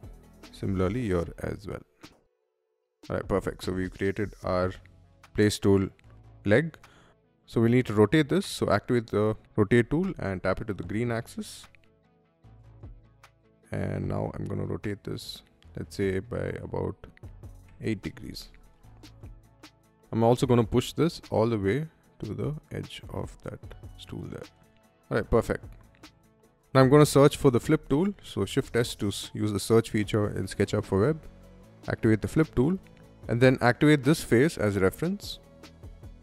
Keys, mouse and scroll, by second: 0.2 m, 0.7 click, 2.0 3, 2.0 Return, 2.5 Escape, 2.5 middle click, 2.7 middle click, 3.6 shift+middle click, 5.9 middle click, 6.9 click, 7.3 middle click, 8.2 q, 9.4 Right, 9.7 Left, 11.8 click, 12.8 middle click, 13.5 click, 17.2 8, 17.4 Return, 17.9 space, 18.2 middle click, 19.2 m, 20.1 click, 20.5 Right, 22.3 click, 23.3-24.8 middle drag, 24.5 space, 26.5-28.8 typing, 31.4 click, 32.3 middle click, 33.0-33.4 middle drag, 33.9-36.2 drag, 35.0 middle click.